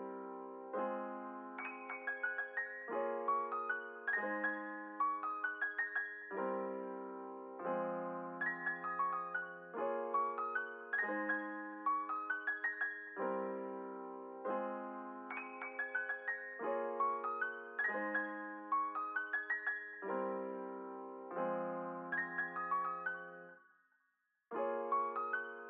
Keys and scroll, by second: 1.6 F9, 2.0 space, 4.3 space, 8.4 space, 18.3 space, 22.6 b, 25.2 Home.